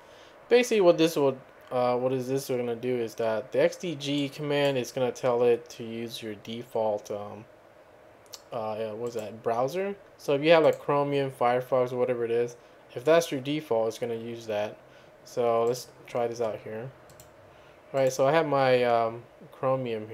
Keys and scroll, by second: 0.0-0.1 typing.